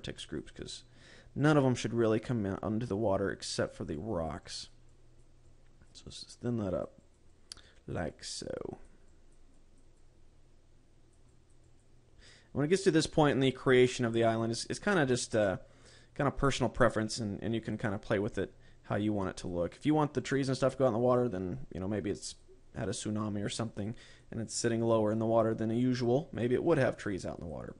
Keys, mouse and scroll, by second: 0.3 click, 1.9 click, 2.7 click, 3.1 click, 3.6 click, 4.5 click, 5.0 click, 5.4 click, 6.0 click, 6.6 click, 7.2 click, 7.6 click, 7.9 click, 8.2 click, 8.7 click, 9.2 click, 9.6 click, 10.1 click, 10.5 click, 11.8 click, 12.2 click, 13.3 click, 14.7 click, 15.1 click, 15.7 click, 16.4 click, 17.0 click, 18.1 click, 18.7 click, 19.7 click, 20.7 click, 22.8 click, 24.2 click, 24.6 click, 25.0 click, 25.7 click, 26.3 click, 26.9 click, 27.5 click.